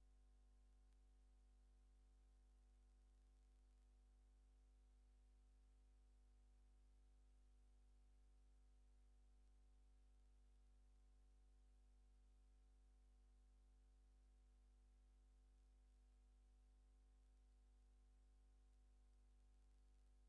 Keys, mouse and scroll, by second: 0.0 scroll down 2, 0.9 scroll down 2, 1.7 scroll down 2, 2.4-3.3 scroll down 4, 3.8 scroll down 2, 4.5-5.2 scroll down 4, 6.7 click, 9.0 scroll up 1, 9.6 scroll up 1, 10.4 scroll up 1, 11.0 scroll up 1, 11.5 scroll up 2, 12.3 scroll up 2, 12.9-13.4 scroll up 4, 13.9-14.8 scroll up 5, 15.5-16.6 scroll up 6, 20.0 click.